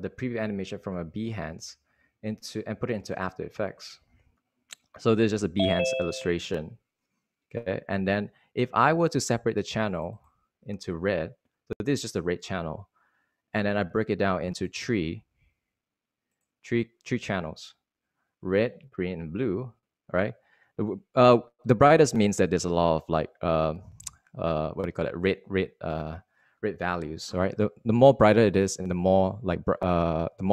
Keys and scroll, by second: 0.8 super+w, 2.1 super+Tab, 2.8 super+Tab.